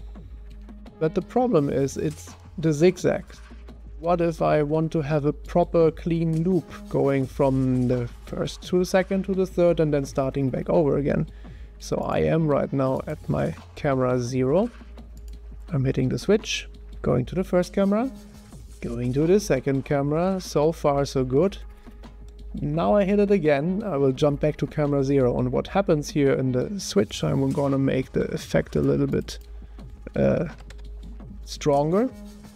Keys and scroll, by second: 0.5 0, 0.9 0, 2.1 0, 16.2 0, 18.5 0, 30.5 5, 30.7 Return.